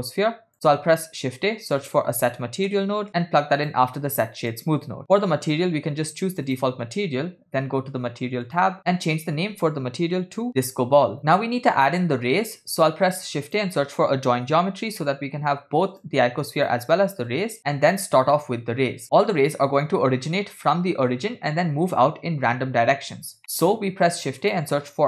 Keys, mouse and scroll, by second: 1.0 shift+a, 4.8 click, 5.6-6.7 drag, 8.5 click, 8.8-11.2 drag, 10.5 BackSpace, 11.2-11.7 scroll down 6, 11.2 l, 13.0 shift+a, 17.3 click, 18.2 middle click, 19.1-19.6 scroll down 2, 21.5 scroll down 2, 23.6 middle click, 23.8 shift+a.